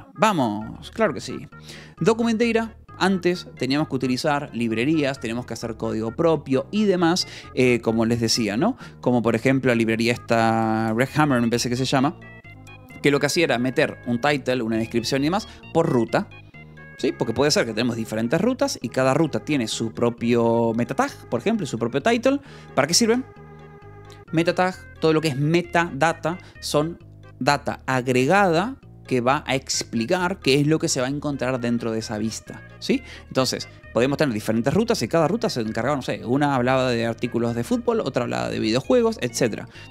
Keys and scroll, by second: 12.1 Escape.